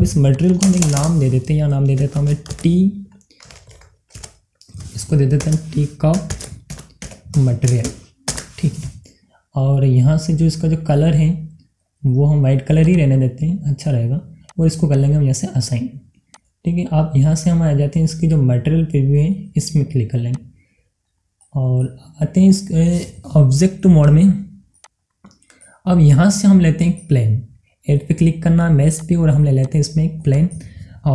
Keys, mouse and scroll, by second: 0.4 click, 3.1 shift+t, 3.5 e, 5.1 a, 6.4-9.3 typing, 8.0 Up, 12.7 click, 20.2 click, 21.7 scroll up 1, 22.3 scroll down 1, 22.4-24.0 middle drag, 24.0 click, 25.8-27.2 middle drag, 27.2 scroll up 1, 27.6 middle click, 28.9 click, 30.9 scroll down 1.